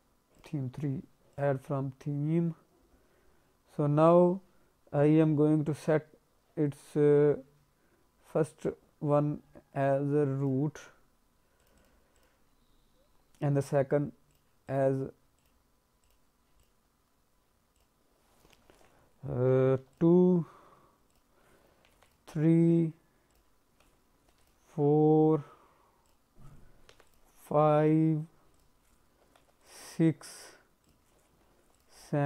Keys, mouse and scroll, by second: 1.3 click, 1.7-2.3 scroll down 1, 2.3-3.6 scroll down 5, 3.6-4.3 scroll up 3, 4.7-5.8 scroll up 4, 5.8-6.3 scroll up 1, 10.4 click, 11.5 click, 11.7 click, 12.1 click, 14.3 click, 14.6 click, 15.3 click, 16.0 click, 16.5 click, 17.7 click, 21.1 click, 23.3 click, 24.9-25.6 scroll down 1, 26.0 click, 27.3-27.9 scroll down 2, 28.5 click, 30.8 click, 32.1-32.2 scroll down 2.